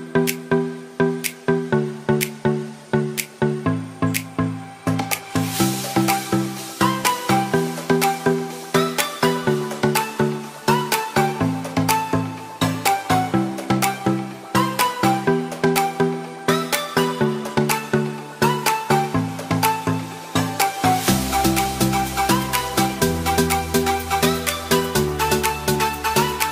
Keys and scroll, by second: 2.9 ctrl+shift+i, 3.4 ctrl+d.